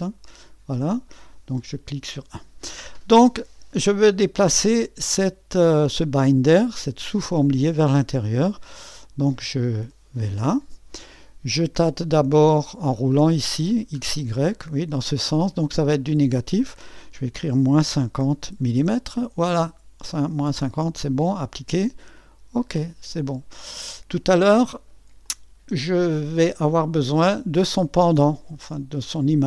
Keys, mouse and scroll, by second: 0.0-0.5 typing, 6.7-12.5 drag, 12.5-13.8 scroll down 1, 13.8-15.9 scroll down 1, 15.9-17.5 scroll down 1, 17.5 -, 17.9 5, 18.8 0, 21.4-23.0 drag, 21.4 typing, 23.0-25.2 scroll down 1, 25.2-29.4 drag.